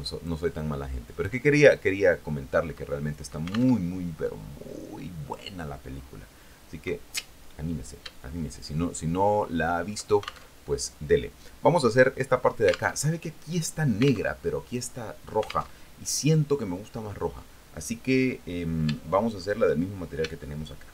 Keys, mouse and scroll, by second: 0.8 click, 1.9-3.5 drag, 4.0 alt+Tab, 8.4-10.2 shift+drag, 10.7 alt+shift+Tab, 13.2 alt+Tab, 14.5 alt+Tab, 16.0 alt+Tab, 19.2 shift+middle click, 20.6 shift+middle click.